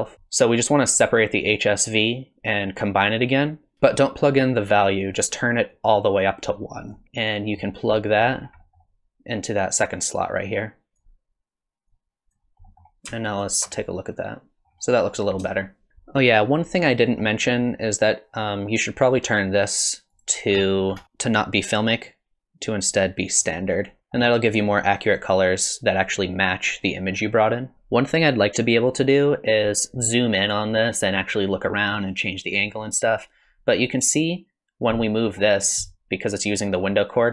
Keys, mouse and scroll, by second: 0.1 middle click, 0.1-1.1 scroll up 8, 5.7 click, 7.0 middle click, 7.0 scroll down 6, 8.0 middle click, 8.4 scroll down 3, 8.6 middle click, 9.8 click, 11.9 click, 12.7 middle click, 13.4 ctrl+shift+click, 13.5 ctrl+shift+click, 14.7-15.0 scroll up 3, 15.5 shift+middle click, 15.9 space, 20.1 click, 20.7-21.0 scroll down 51, 21.6 click, 24.0 shift+middle click, 24.0 scroll down 1, 27.7 middle click, 34.2 middle click, 35.8 middle click.